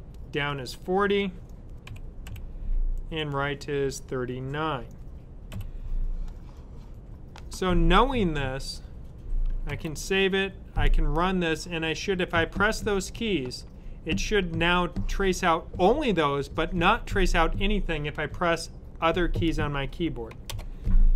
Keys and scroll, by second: 1.5-2.3 typing, 5.4 9, 9.6 super+s.